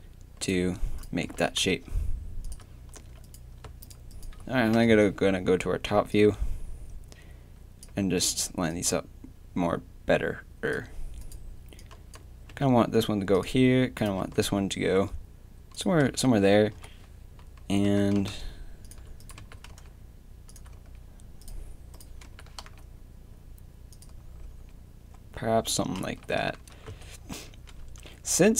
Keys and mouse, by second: 1.2 g, 3.0 a, 4.7 KP_7, 8.2-10.7 drag, 11.2-12.5 drag, 12.5 g, 13.3 click, 14.2 g, 16.1 z, 16.8 KP_3, 17.8 g, 19.4 g, 20.7 z, 22.3 g, 24.4 z, 26.0 z, 26.7 Tab, 26.9 z, 27.8 Tab.